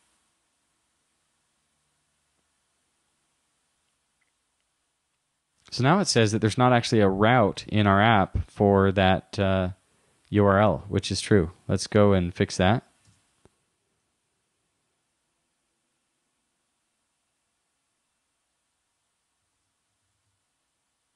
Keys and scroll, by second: 13.1 super+Tab, 19.5 super+t.